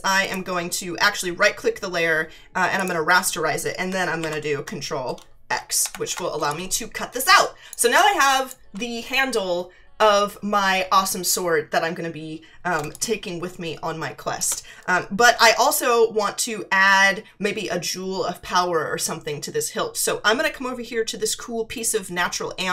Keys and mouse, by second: 0.2 right click, 2.8 click, 4.2 ctrl+x, 5.8 ctrl+=, 6.4 space, 6.5 click, 7.7 space, 7.9 click, 12.8 space, 12.9 click, 14.4 space.